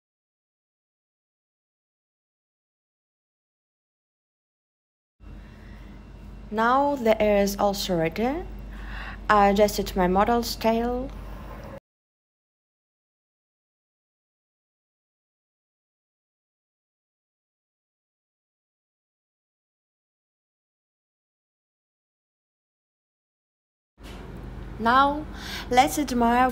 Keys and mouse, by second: 0.5 e, 1.6 click, 2.0 m, 12.2 click, 17.4 super+z, 18.7 click.